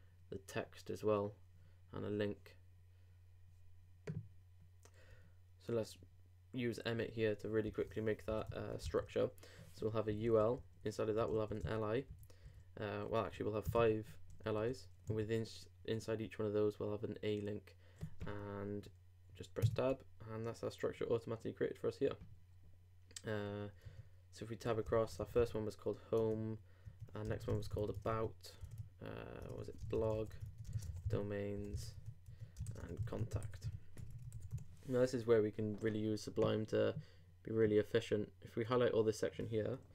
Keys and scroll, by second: 7.6 shift+., 8.3 shift+l, 8.8 shift+i, 19.6 shift+Tab, 24.7-25.7 typing, 27.1-28.0 typing, 28.6 super+Tab, 29.8 shift+super+Tab, 29.8 shift+super+b, 29.9-31.4 typing, 32.4-33.3 typing.